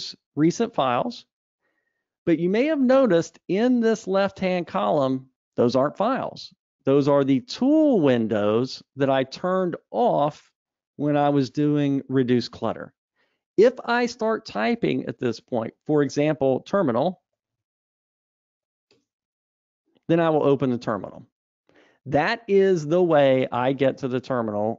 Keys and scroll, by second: 1.5 super+e.